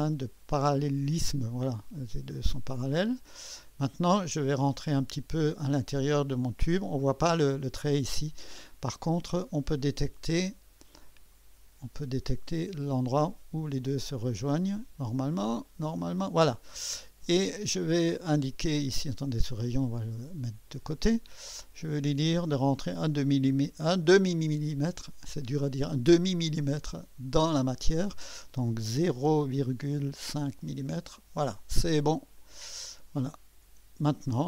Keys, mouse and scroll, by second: 0.3 click, 2.4-6.8 drag, 8.5-10.2 scroll up 1, 10.2-10.7 scroll up 1, 10.7-11.3 scroll up 1, 11.3 click, 13.1 click, 13.1 typing, 14.7 click, 15.7 click, 19.1-20.8 drag, 22.2 click, 23.5 click, 27.5 click, 28.9 0, 29.2 ., 30.2 5, 30.6 Return, 32.4-33.6 drag, 33.6 Return, 34.3-34.4 drag.